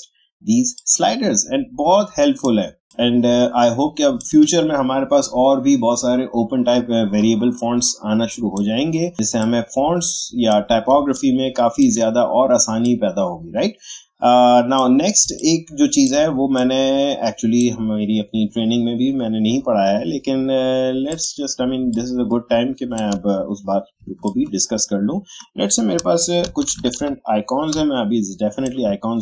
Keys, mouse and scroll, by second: 0.7-6.8 drag, 7.8-10.9 drag, 10.9 space, 11.1 click, 12.8-15.2 drag, 15.2 space, 15.4 click, 15.7 space, 16.5-21.0 drag, 21.9-26.4 shift+drag, 26.4 Up.